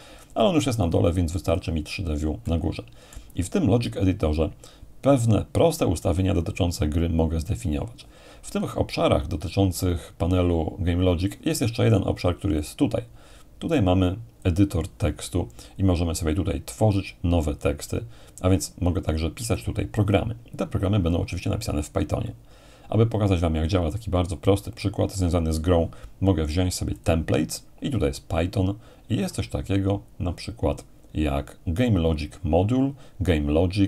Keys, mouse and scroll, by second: 0.8-4.1 drag, 2.4-4.1 middle drag, 12.6-15.4 drag, 27.0-28.0 drag.